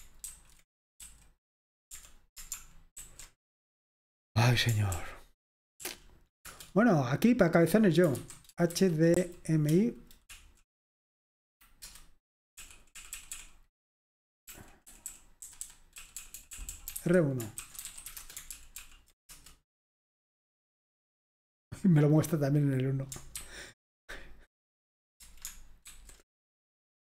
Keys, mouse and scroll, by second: 0.3 ctrl+c, 1.0 v, 3.0 alt+super+r, 5.9 ctrl+p, 6.5 Return, 8.2-9.2 typing, 10.3 Right, 12.0 Return, 12.6 Right, 13.0 Right, 13.1 Right, 13.3 Right, 14.4 Up, 14.6-19.8 typing, 18.6 ctrl+p, 18.8 ctrl+p, 23.4 ctrl+x, 26.0 alt+super+r.